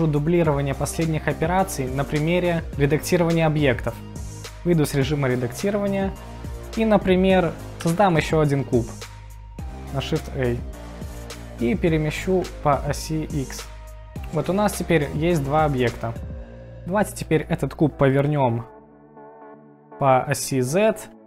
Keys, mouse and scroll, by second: 5.3 Tab, 6.4 middle click, 7.9 shift+a, 12.0 g, 12.4 x, 13.7 middle click, 14.6-15.1 middle drag, 15.9 middle click, 19.2 r, 19.5 x, 19.6 z.